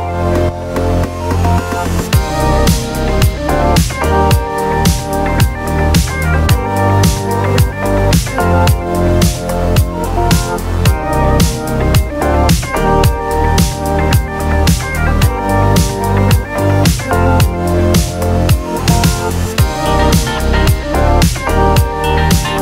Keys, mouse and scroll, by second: 1.2-2.1 scroll down 2, 9.7-10.8 drag, 10.8 right click, 11.3 scroll up 2, 12.3-14.6 drag, 14.6 scroll down 1, 15.1 scroll down 2, 15.5 click, 15.9 scroll down 1, 16.5 scroll up 2, 17.2-18.0 drag, 18.6 scroll up 2, 18.9 click, 19.8-20.5 drag, 20.5 scroll down 3.